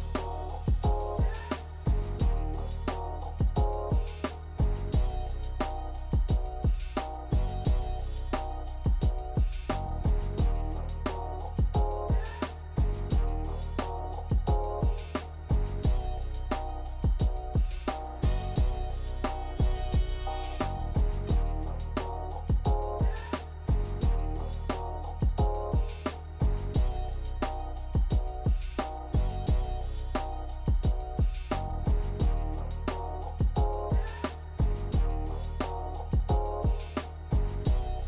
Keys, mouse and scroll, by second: 0.8 click, 4.3 click, 10.7 click, 14.3 click.